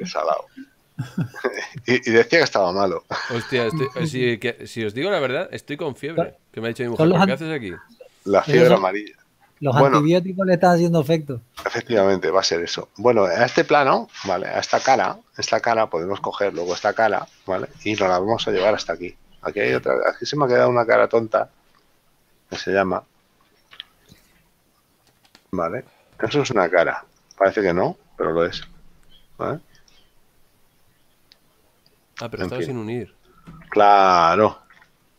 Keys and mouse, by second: 1.8 Tab, 4.8 middle click, 16.5 click, 18.1 right click, 20.8 right click, 23.1 z, 23.8 a, 24.5 c, 25.1 click, 27.5 right click, 29.2 g, 30.1 right click, 34.2 a.